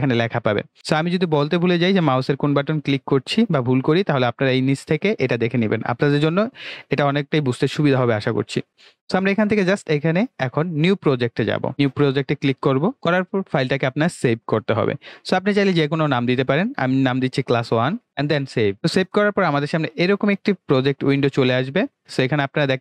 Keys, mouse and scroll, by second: 0.8 click, 4.3 click, 11.0 click, 12.9 click, 15.5 click, 17.8-18.7 typing, 18.7 click.